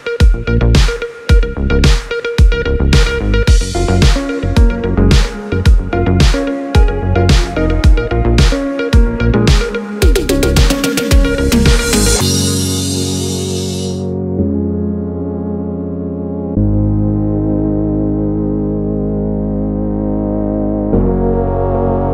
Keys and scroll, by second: 1.5 space, 6.5 space.